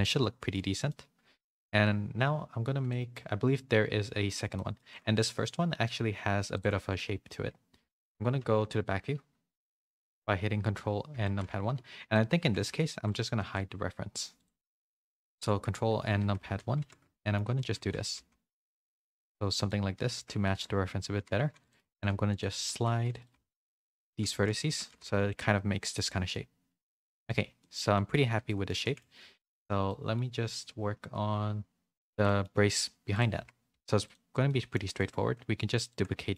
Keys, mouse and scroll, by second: 0.8 middle click, 2.9 middle click, 4.5 middle click, 6.6 Tab, 6.9 middle click, 7.7 2, 8.0 z, 8.4 ctrl+KP_1, 9.1 KP_1, 10.0 ctrl+KP_1, 11.1 Tab, 11.5 z, 12.1 middle click, 13.4 h, 14.3 click, 15.2 ctrl+KP_1, 16.2 Tab, 16.4-18.1 typing, 17.1 shift+middle click, 19.9 a, 20.1 a, 20.4 shift+middle click, 21.3-25.0 typing, 24.6 Tab, 25.4 middle click, 26.1 a, 26.3 middle click, 27.2 a, 27.5 middle click, 27.5 a, 28.1 a, 28.4 middle click, 28.4 a, 28.8 shift+middle click, 29.8 middle click, 32.2 middle click, 33.3 Tab, 33.7 Tab, 34.4 middle click, 34.9 shift+middle click, 35.8 ctrl+click, 36.2 middle click.